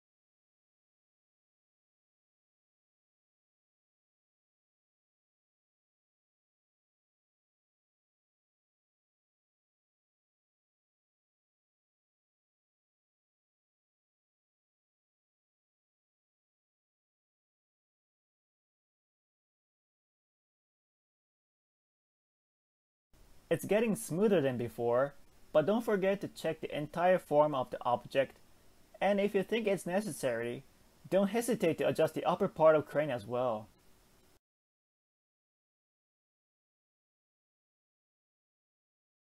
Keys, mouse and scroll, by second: 0.1 click, 0.7 g, 6.7 click, 7.0 g, 10.0 middle click, 10.7 g, 16.6-17.9 middle drag, 17.9 click, 18.2 g, 22.3 Tab, 22.6-22.9 scroll down 1, 22.9-25.6 middle drag, 25.6 Tab, 25.9 scroll up 3, 26.1 scroll down 1, 26.1 scroll up 1, 27.0 KP_1, 27.9 alt+z, 28.2-28.7 scroll up 2, 28.7-29.1 shift+middle drag, 29.5-30.5 shift+middle drag, 30.5 click, 31.1 scroll down 2, 31.5 g, 34.2 shift+middle click, 34.5-34.9 scroll up 3, 34.9 shift+middle click, 35.5 click, 35.8 click, 36.6 g, 39.0 shift+middle click.